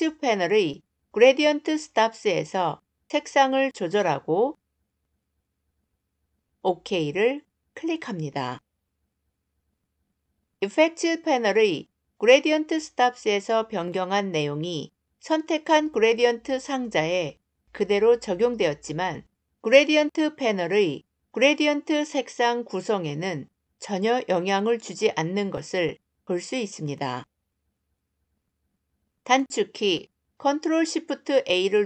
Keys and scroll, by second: 29.0 ctrl+shift+a.